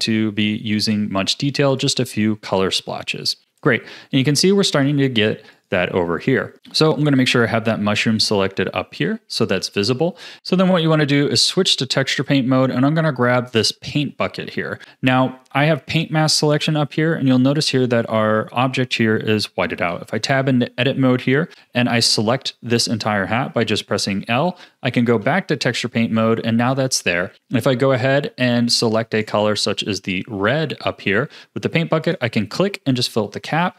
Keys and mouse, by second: 3.0 click, 4.8 click, 6.8 click, 9.4 click, 10.4 Tab, 19.9 Tab, 21.6 l, 24.1 Tab, 28.2 x, 29.5 x.